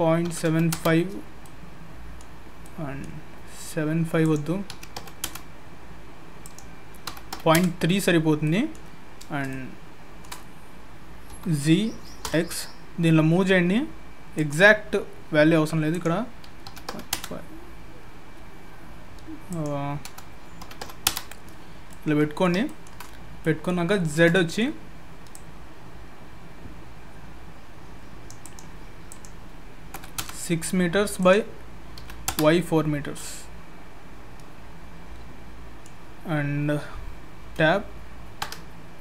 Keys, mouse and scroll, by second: 1.4 middle click, 2.2-2.6 scroll up 2, 2.6 middle click, 4.2 click, 6.4 click, 8.4 middle click, 9.5 shift+middle click, 11.3 g, 15.9 click, 19.5 click, 21.9 middle click, 22.6 shift+middle click, 23.4 middle click, 23.9 shift+middle click, 24.3 middle click, 25.3 click, 29.1 click, 31.2 click, 33.0-33.5 scroll down 3, 33.1 middle click.